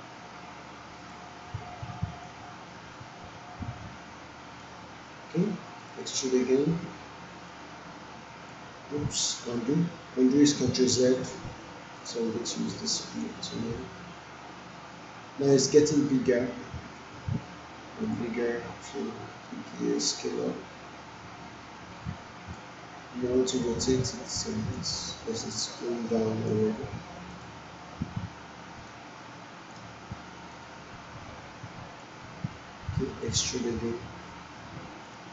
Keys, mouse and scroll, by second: 11.0 ctrl+z, 12.0-17.3 drag, 30.5-32.0 drag, 33.2-35.3 drag.